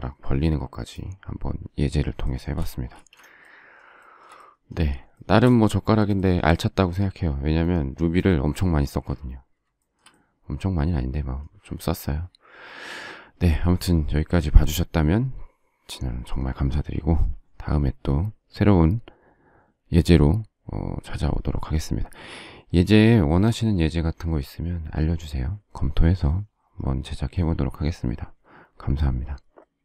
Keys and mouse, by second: 2.9 shift+space.